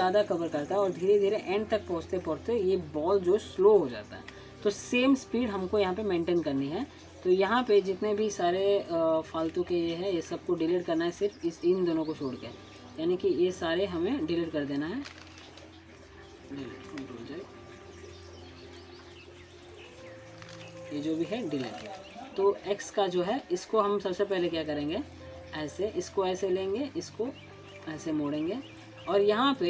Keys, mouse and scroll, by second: 8.3 click, 9.4-9.7 scroll down 1, 11.4-12.3 drag, 19.5 ctrl+z, 20.7-21.4 click, 21.8-22.2 scroll down 1, 22.2-22.8 click, 22.8 scroll up 1, 24.6 click, 25.1 scroll down 1, 25.4 alt+scroll up 1, 25.7 alt+middle click, 25.9 alt+scroll up 1, 26.5 alt+scroll down 1, 26.5-26.8 scroll up 1, 26.8-27.7 click, 29.0-29.6 middle drag.